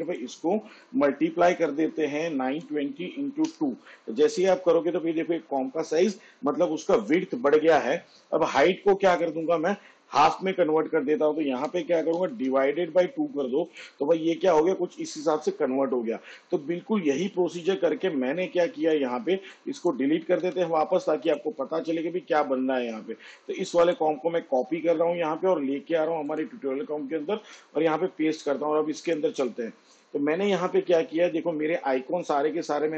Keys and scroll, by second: 2.4 shift+8, 3.5 2, 11.5 Right, 12.2 /, 12.6 2, 20.4 Delete, 24.7 ctrl+c, 27.4 ctrl+v.